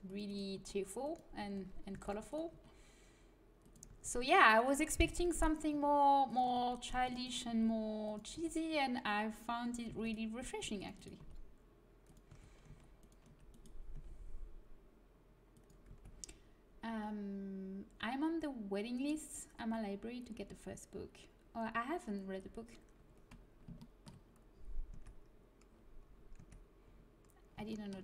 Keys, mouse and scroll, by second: 0.3 right click, 0.5 g, 1.6 a, 1.8 c, 2.4 g, 3.5 click, 3.8 a, 4.9-8.3 typing, 7.3 right click, 9.8 c, 10.5 c, 11.1 g, 12.2 a, 12.6 c, 13.5-15.1 right drag, 13.9 g, 15.8 a, 22.6-24.0 middle drag, 24.8 Tab, 26.3 Tab.